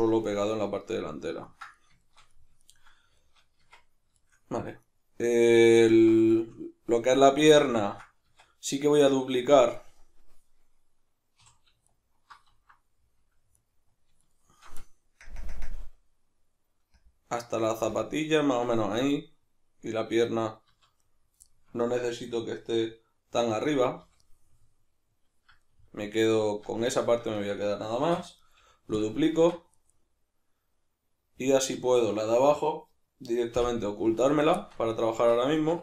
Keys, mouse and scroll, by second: 3.6 Tab, 4.8 right click, 5.8-7.8 ctrl+middle drag, 8.3 Tab, 9.8 middle click, 11.3 3, 11.9 alt+right click, 13.6 alt+right drag, 14.2 alt+shift+right drag, 15.2 ctrl+KP_Add, 18.0 ctrl+KP_Subtract, 19.1-28.5 middle drag, 20.7 z, 24.0 b, 26.6 z, 28.0 shift+d, 28.5 right click, 28.6 p, 29.4 Tab, 29.8 right click, 29.9 right click, 31.4 right click, 33.6 h, 34.2 right click, 34.6-35.8 shift+middle drag, 35.2 Tab.